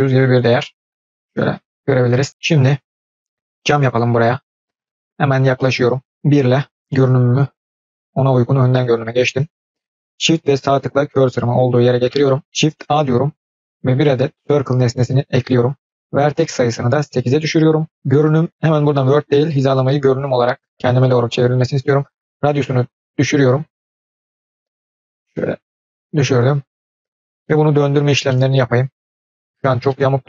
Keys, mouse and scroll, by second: 0.6-1.3 scroll up 5, 1.3-2.3 scroll down 2, 2.3-3.0 scroll down 1, 3.1-3.5 shift+middle drag, 3.7-4.3 scroll up 1, 4.3 scroll up 1, 4.7 shift+middle drag, 5.1-5.5 scroll up 1, 5.5 middle click, 6.1 KP_3, 6.1 KP_1, 6.5-7.7 scroll up 5, 7.7-9.2 shift+middle drag, 10.7-12.0 shift+right drag, 12.6 shift+a, 16.2-17.9 drag, 18.5-20.2 drag, 21.8-26.1 drag, 27.3 middle click, 27.7 scroll down 4, 28.2 middle click, 28.9-29.3 scroll up 1, 29.3-29.6 shift+middle drag, 29.8-30.2 middle drag.